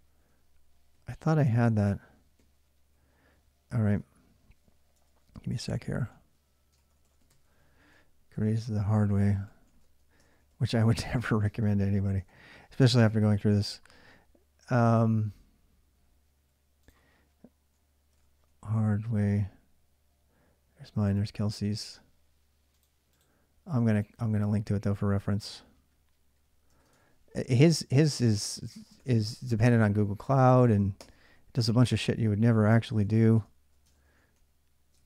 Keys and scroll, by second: 0.0-4.6 typing, 4.7 Return, 5.3 ctrl+[, 5.3 ctrl+j, 5.6-12.7 typing, 13.1 alt+Tab, 17.6-18.7 typing, 24.1 alt+Tab, 26.5-32.8 typing, 26.8 ctrl+[, 30.2 ctrl+[, 31.6 ctrl+[, 33.1 Return, 33.6 ctrl+[, 33.7 ctrl+j, 33.8-35.0 typing.